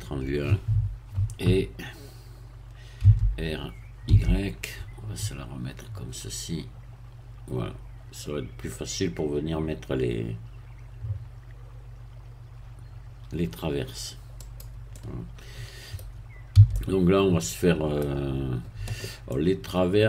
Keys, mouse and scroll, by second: 2.0 KP_1, 3.0 r, 4.1 y, 14.4 click, 14.9-16.2 middle drag, 16.6 a, 16.7-18.6 middle drag, 19.3-20.0 middle drag.